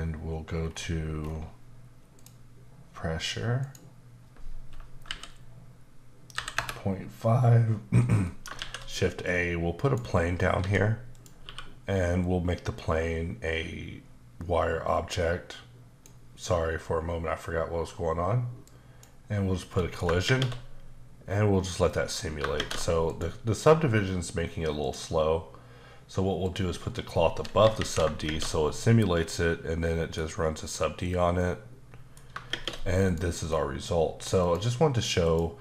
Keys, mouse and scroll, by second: 0.6-2.1 scroll down 5, 2.1 click, 3.6 click, 5.0 KP_Decimal, 6.3 KP_5, 6.6 KP_Enter, 8.3 middle click, 8.6 shift+a, 10.3 scroll down 2, 10.6 s, 11.1 click, 11.4 q, 12.2 click, 18.6 click, 19.7 middle click, 20.3 shift+space, 22.5 shift+space, 23.1 click, 24.8 click, 26.4 click, 27.8 shift+Left, 28.2 shift+space, 29.2 middle click, 31.4 middle click, 32.5 shift+space, 33.0 click, 34.4 click, 35.2 click.